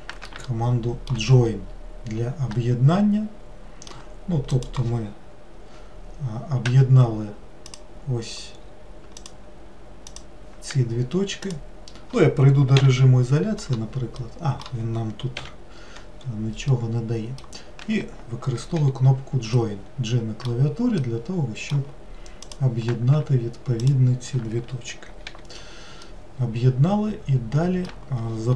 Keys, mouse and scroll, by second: 0.5-1.5 shift+middle drag, 1.5-2.4 scroll up 2, 2.6-4.6 middle drag, 4.6 click, 6.7 1, 7.7 click, 8.6 scroll up 2, 9.2 click, 10.1 click, 11.5 shift+click, 12.8 /, 14.2-15.4 middle drag, 15.4 /, 16.8-18.8 middle drag, 18.8 j, 19.6-22.5 middle drag, 22.5 click, 23.9 shift+click, 25.3 j, 26.1-28.5 middle drag.